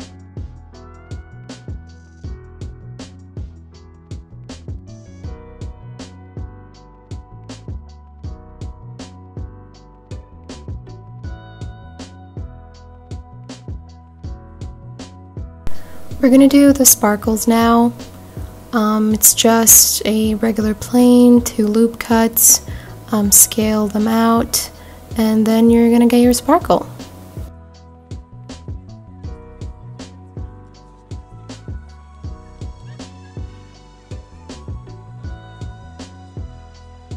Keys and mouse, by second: 3.4-4.4 drag, 5.0 click, 11.7 shift+a, 14.3-15.4 middle drag, 16.1 g, 16.2 z, 16.9 click, 17.3-17.8 middle drag, 18.2 r, 18.5 x, 18.8 KP_9, 18.9 KP_0, 19.2 KP_Enter, 20.9 click, 21.2-21.9 middle drag, 22.9 g, 23.0 z, 23.6 click, 24.4-25.4 drag, 25.9 Tab, 27.1 ctrl+r, 28.0 click, 28.5 ctrl+r, 29.5 click, 30.0 Tab, 30.9 r, 31.3 y, 31.9 KP_4, 32.0 KP_5, 32.3 KP_Enter, 33.5 middle click, 34.2 Tab, 35.4 click, 36.1 click, 36.9 shift+click.